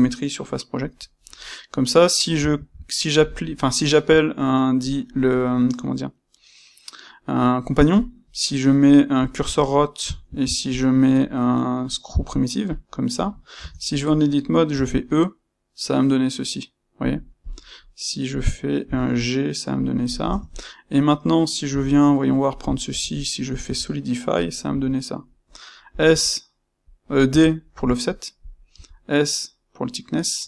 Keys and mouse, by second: 1.3-17.0 middle drag, 2.5 shift+c, 10.2 shift+c, 13.5 Tab, 14.6 b, 17.3 click, 18.8 c, 19.8 click, 20.2 Tab, 20.5-22.5 middle drag, 21.6 c, 22.5 click, 22.9 space, 23.6 space.